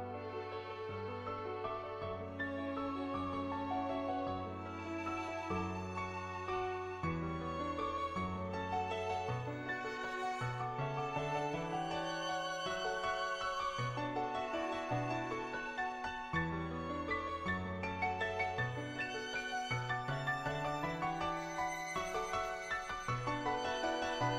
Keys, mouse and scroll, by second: 1.2 ], 1.5-2.9 drag, 3.9-6.0 drag, 6.0 middle click, 6.6-8.1 middle drag, 8.7 click, 10.7 shift+click, 18.1 click, 18.5 ctrl+z, 21.0 click, 21.6 ctrl+z, 22.0 [, 22.1 click, 22.1 [, 22.5 [, 22.6 [, 22.7 click, 24.1 ], 24.2 ], 24.3 click.